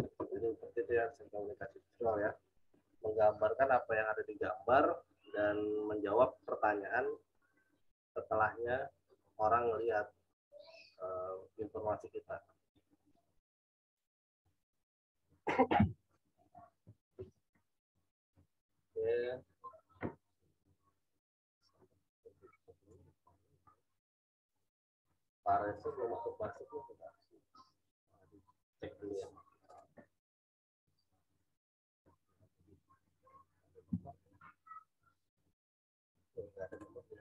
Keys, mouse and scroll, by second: 35.3 click.